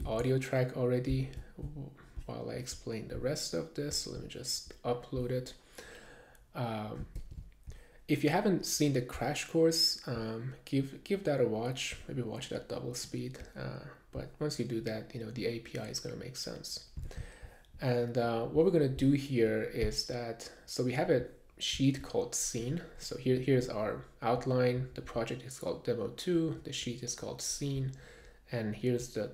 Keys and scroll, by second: 0.1 super+Tab, 7.2 super+`, 8.9 super+`, 18.3 super+`.